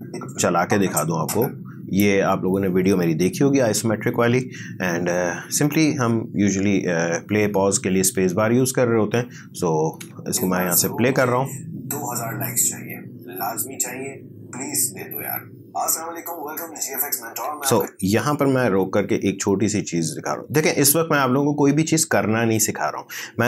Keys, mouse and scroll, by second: 10.0 space, 17.6 space, 18.7-19.9 typing, 21.0 =.